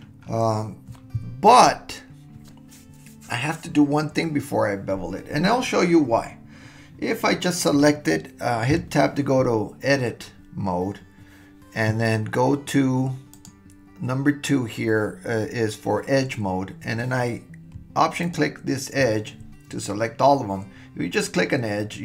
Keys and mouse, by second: 8.8 Tab, 13.4 click, 18.2 alt+click, 21.1 click.